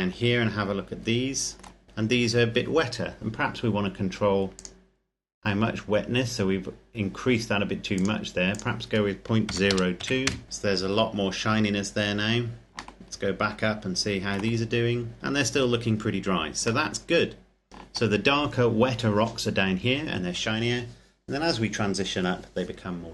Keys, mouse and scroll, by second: 1.8-2.1 scroll up 1, 3.3-4.5 scroll up 1, 4.5 click, 8.2 click, 9.6 KP_Decimal, 9.8 KP_0, 10.1 KP_2, 10.4 KP_Enter, 11.7-12.6 scroll down 1, 13.0 shift+middle click, 14.6-15.3 scroll up 1, 15.3-16.4 scroll down 1, 16.6 shift+middle click.